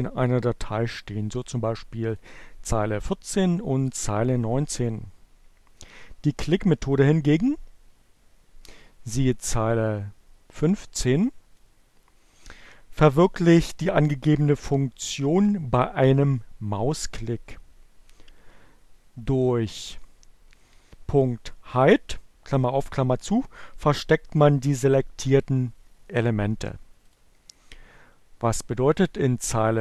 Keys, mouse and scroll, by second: 1.5 click, 8.9 click, 24.2-26.9 drag, 26.9 middle click, 26.9 click.